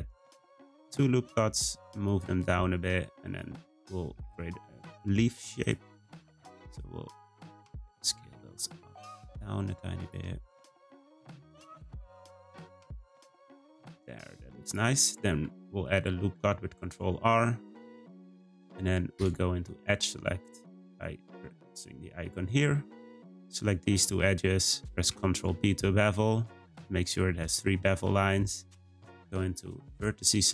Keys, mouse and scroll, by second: 3.1 click, 3.6-4.1 scroll up 1, 4.1 s, 6.1 click, 6.5 s, 7.7 click, 8.2 s, 10.6 click, 11.2 s, 12.2 click, 12.7 s, 13.6 click, 14.0 s, 15.3 r, 19.1 2, 19.8-23.0 scroll up 2, 23.4 click, 23.8 shift+click, 24.9 b, 29.9-30.5 drag.